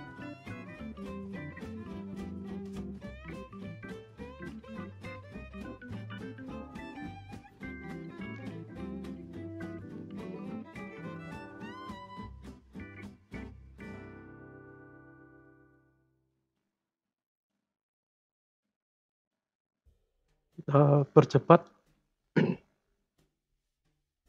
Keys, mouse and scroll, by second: 0.7 shift+s, 1.4 r, 10.1-11.0 drag, 11.2 space, 12.9 space, 13.7 click, 14.5 click, 16.9-17.4 drag, 17.4 space, 18.4 space, 18.9 click, 19.7 click, 20.5-23.6 drag, 23.6 space.